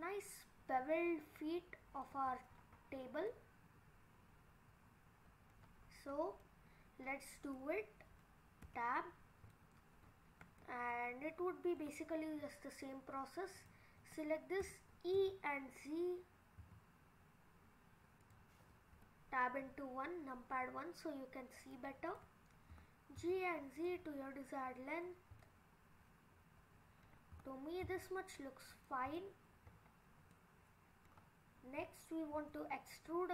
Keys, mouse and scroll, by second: 2.6-3.2 scroll down 6, 3.3 middle click, 5.4 middle click, 5.8 scroll down 2, 6.4 middle click, 7.2-7.5 scroll down 2, 7.6 middle click, 8.7 Tab, 9.1-9.6 scroll up 5, 9.6 middle click, 10.1-10.6 scroll down 3, 10.6 middle click, 11.7 middle click, 13.6 click, 14.7 e, 18.9 KP_1, 20.0-21.7 scroll up 1, 21.7 click, 21.7 scroll up 1, 22.7 g, 24.1 middle click, 25.1-25.6 scroll down 2, 25.5 middle click, 27.3 g, 29.2 middle click, 29.5-30.3 scroll up 6, 30.3 middle click, 31.0 middle click, 32.4 e.